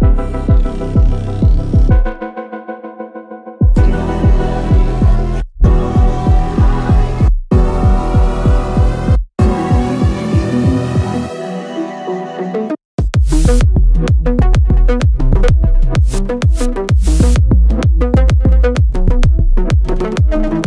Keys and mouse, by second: 2.1 2, 2.2 click, 3.2 middle click, 5.4 shift+s, 7.7 Tab, 8.5-12.6 right drag, 13.9 shift+s, 15.1-16.6 middle drag, 17.7 x.